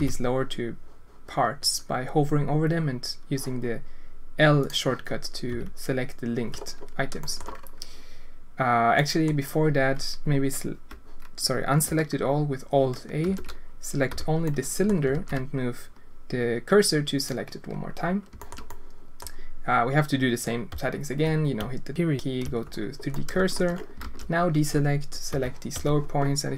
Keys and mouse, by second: 4.6 click, 5.5 l, 7.2 shift+middle drag, 8.9 drag, 13.2 alt+a, 14.1 click, 14.4 middle click, 15.1 shift+s, 18.3 shift+click, 18.6 click, 21.5 ., 23.1 alt+shift+click, 24.0 alt+a, 25.3 l, 25.7 l.